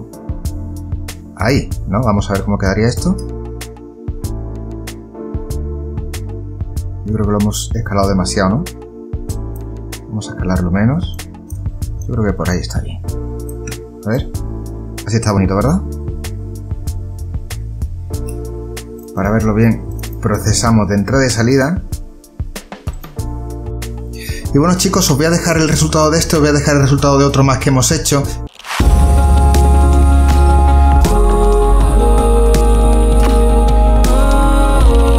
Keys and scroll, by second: 3.5 space, 8.3 space, 18.6 space.